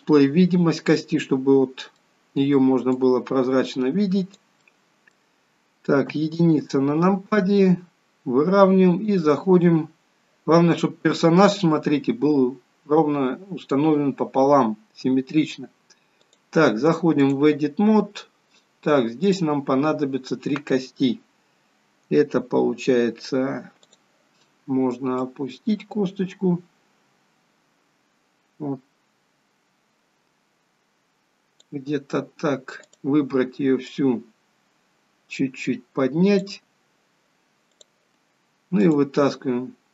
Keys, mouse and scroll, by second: 1.1 middle click, 3.1 click, 4.9 middle click, 6.2 KP_1, 10.1-10.7 scroll up 2, 11.2-12.9 scroll down 3, 12.9 scroll up 1, 16.4 click, 18.2-19.3 scroll up 2, 19.4 click, 24.1 click, 25.4 click, 33.0 click, 34.1 click, 37.9 click, 39.0 click.